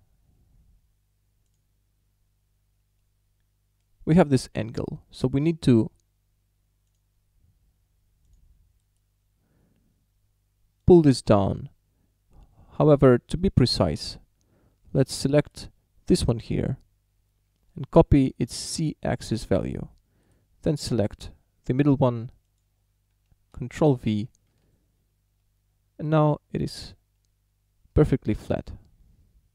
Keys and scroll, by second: 18.5 ctrl+c, 23.9 ctrl+v, 24.5 Return.